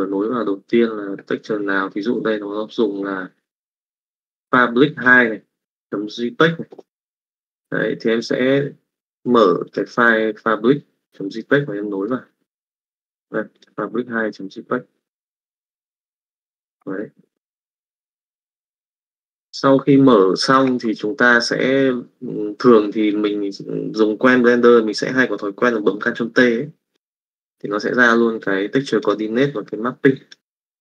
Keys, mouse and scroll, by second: 7.7 middle click, 9.7 click, 11.5 middle click, 12.7 middle click, 13.5 click, 13.8 middle click, 17.0 middle click, 18.0 middle click, 21.1 middle click, 27.8 middle click, 28.4 click, 29.5 click.